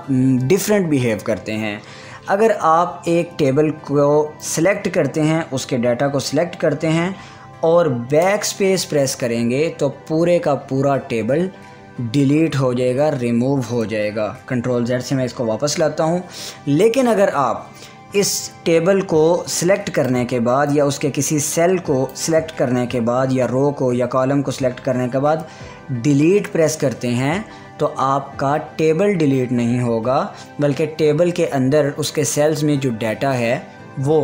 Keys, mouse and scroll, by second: 5.0-14.7 drag, 14.7 ctrl+z, 20.5-34.2 drag.